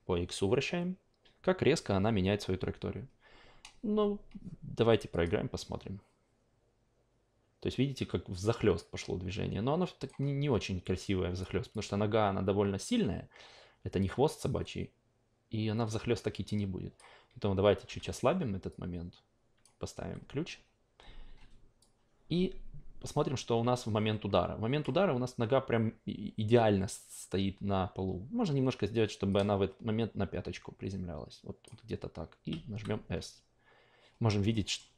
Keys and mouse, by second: 5.1 click, 10.0 click, 11.2 click, 11.7-19.6 drag, 19.9 s, 21.8-24.8 drag, 29.3-33.3 drag, 34.5 alt+middle click.